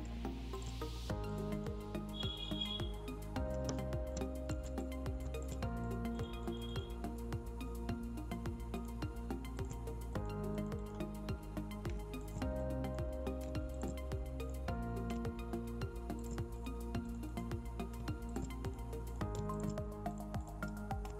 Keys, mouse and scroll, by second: 0.0-0.5 alt+scroll down 1, 0.5 alt+click, 1.8-2.2 scroll down 1, 3.5 space, 3.7 click, 5.1 alt+click, 13.3 alt+click, 14.6-16.1 scroll down 2, 16.1 click, 17.4-18.2 scroll down 2, 18.2 alt+click, 20.6-21.1 scroll up 2.